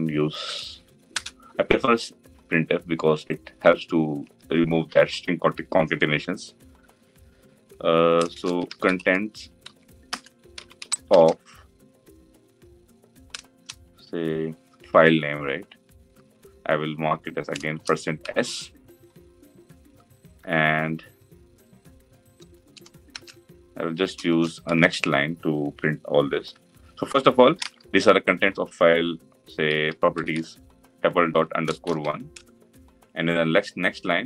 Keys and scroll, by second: 0.8 Return.